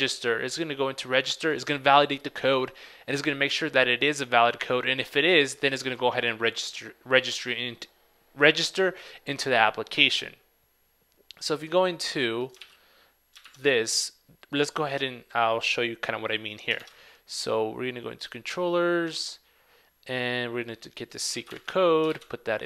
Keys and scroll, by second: 12.7 super+w, 13.7 super+Tab, 18.3 super+Tab, 21.4 super+c, 22.2 super+v.